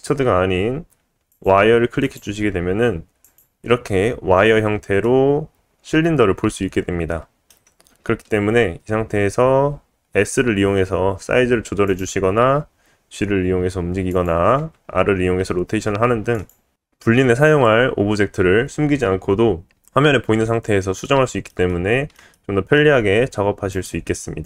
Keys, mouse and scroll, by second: 3.2 click, 5.0-8.0 middle drag, 9.4 s, 12.5 g, 14.6 r, 16.8 middle click.